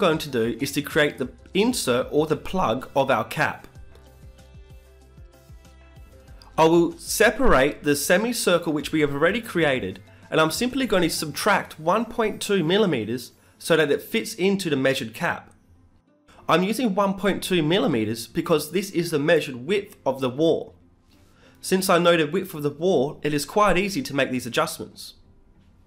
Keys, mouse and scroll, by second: 1.6 shift+s, 2.4 e, 2.8 s, 4.1 a, 4.3 a, 4.6 w, 5.8-7.7 middle drag, 8.1-9.9 right drag, 8.4 b, 9.6 shift+d, 9.9 right click, 10.9 p, 12.1 Tab, 12.5-15.4 right drag, 13.2 Tab, 14.0 shift+s, 16.3-17.9 middle drag, 17.9 Tab, 18.9 Tab, 20.7 KP_Add, 21.3 KP_Add, 21.5 KP_Add, 21.7 KP_Add, 23.2-24.9 drag, 24.4 KP_Add, 24.6 KP_Add, 25.5-25.8 drag.